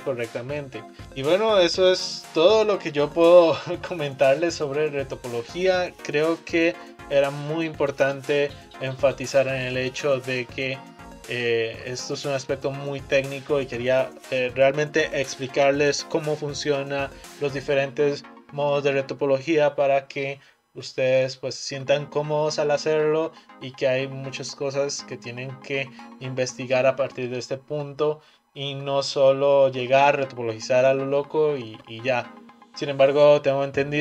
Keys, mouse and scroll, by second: 0.4 click, 1.0-4.5 middle drag.